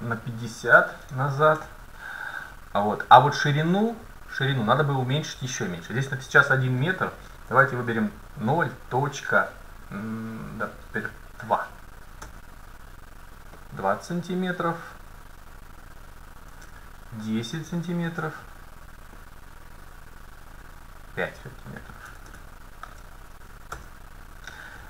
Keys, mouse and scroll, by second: 0.2-2.2 middle drag, 3.9-5.6 drag, 13.6-15.8 drag, 19.2-21.0 drag, 22.3 BackSpace.